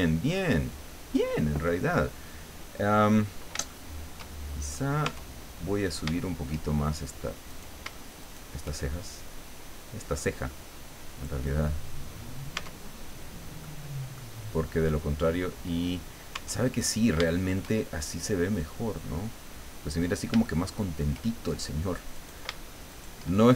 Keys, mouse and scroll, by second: 0.5-0.8 scroll up 1, 2.2-2.6 scroll up 2, 2.8 scroll down 2, 3.7 shift+middle click, 4.6 shift+right click, 5.0 Tab, 5.7-6.2 scroll up 3, 6.2 shift+middle click, 7.5 right click, 8.2 shift+right click, 9.1-11.7 shift+drag, 12.2 scroll down 1, 12.6 Tab, 13.0 scroll down 1, 13.6 middle click, 15.2-15.5 scroll up 1, 16.4 Tab, 16.7-17.1 scroll up 1, 17.3 shift+middle click, 18.5-20.4 drag, 20.5 shift+middle click, 22.2 right click, 22.9 shift+right click.